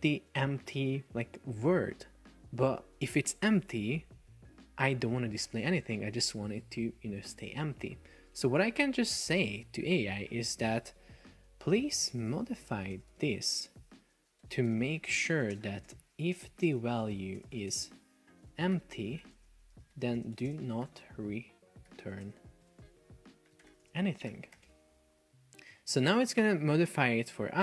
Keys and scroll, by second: 8.4 F1, 12.2 space, 14.9 space, 17.9 shift+2, 18.5 shift+e, 19.3 shift+2, 19.4 space, 20.5 space, 22.3 space, 22.7 BackSpace, 23.9 space, 24.7 Return.